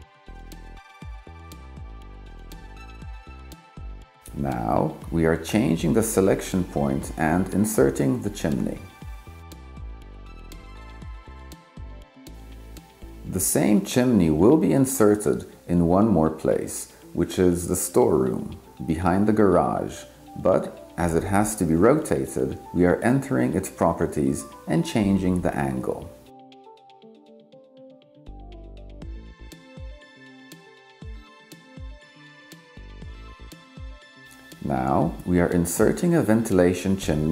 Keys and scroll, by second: 0.0 0, 24.4 9.